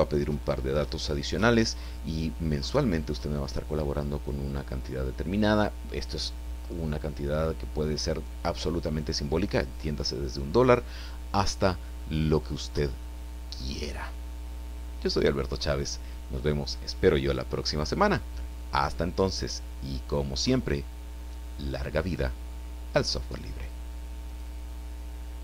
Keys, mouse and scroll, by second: 24.3 click.